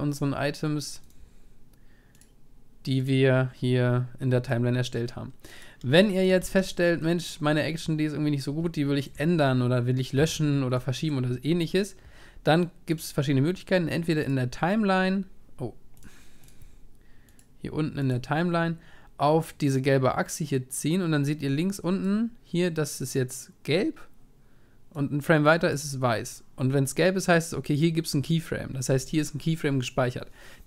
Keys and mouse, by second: 1.0-4.6 right drag, 5.3-6.4 drag, 6.0-9.6 middle drag, 6.4 ctrl+s, 12.9-14.2 drag, 16.4-23.3 drag.